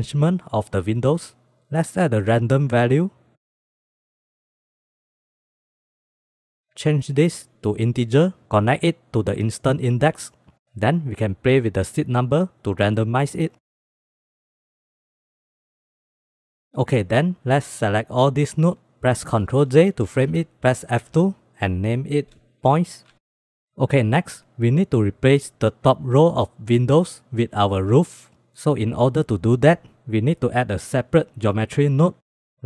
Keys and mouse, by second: 1.5 click, 2.0 shift+a, 4.2 click, 4.5-4.8 drag, 5.1-5.6 drag, 5.9 drag, 6.3-6.6 middle drag, 6.7-8.0 drag, 8.5 middle click, 9.1-10.2 drag, 12.9-13.9 drag, 14.2-15.2 drag, 15.9 ctrl+s, 16.7-18.2 drag, 19.2 ctrl+j, 21.0 F2, 27.7 ctrl+s, 28.7 click, 30.0-31.7 drag, 32.3 g.